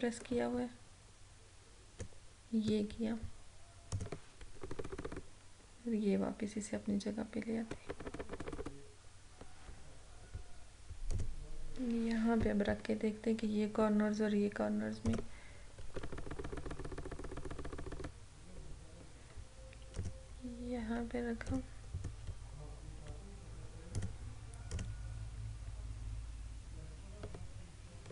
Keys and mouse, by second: 4.6 Right, 11.2 click, 15.2 click, 16.0 Right, 18.6 Down, 20.1 click, 22.0 right click, 24.1 click.